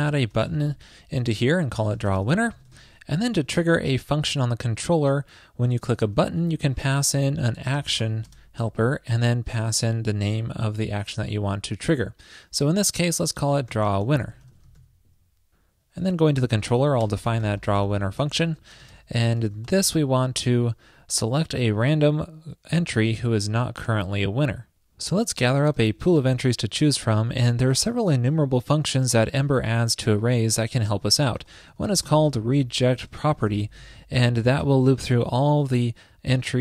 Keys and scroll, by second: 0.0 ctrl+shift+<, 3.4 super+Left, 3.5 alt+Right, 14.9 super+s.